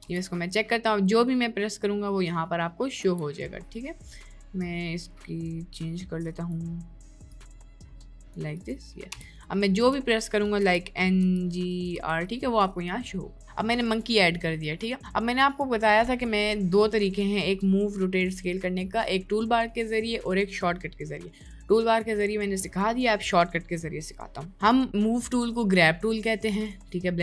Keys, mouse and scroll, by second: 0.0 n, 0.5-0.9 middle drag, 3.1 n, 4.7-6.6 drag, 7.3-8.4 drag, 8.7 right click, 9.3-11.9 typing, 9.5 middle click, 14.7 middle click.